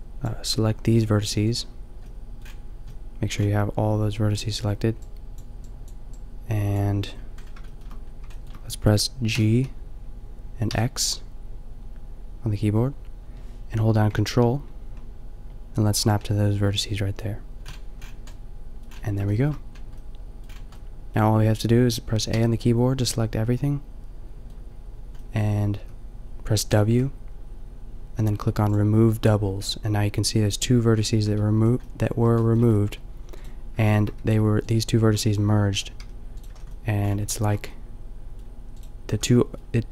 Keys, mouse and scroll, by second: 1.0 g, 4.7 middle click, 5.0-7.1 drag, 7.1 middle click, 7.2 click, 7.5 middle click, 9.3 g, 16.1-17.6 drag, 17.7 a, 22.3 a, 26.0 w, 26.7 w, 30.9 middle click, 31.5 a, 31.8 middle click, 33.4-34.5 right drag, 34.3 g, 36.0 click, 36.0 g, 36.5 a, 39.2 a.